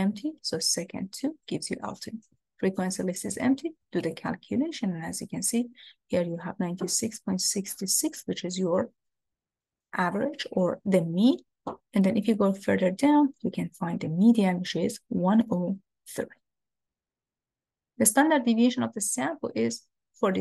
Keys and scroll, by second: 1.5 2, 2.4 Down, 3.4 Down, 4.1 Return, 12.4 Down.